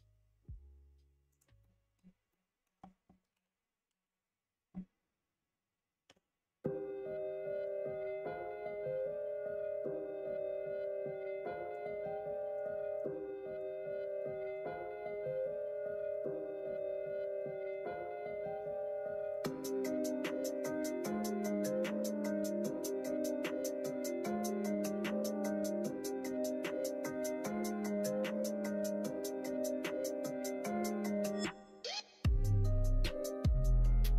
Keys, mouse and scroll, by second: 1.6 middle click, 2.4 middle click, 3.2 KP_1, 3.8 KP_3, 6.0 g, 12.9 click, 14.0 middle click, 14.4 click, 14.9 middle click, 15.8 middle click, 16.5 middle click, 17.1 middle click, 19.7-22.2 middle drag, 24.7-27.3 middle drag, 28.0-29.8 middle drag, 32.6 click, 33.8 2.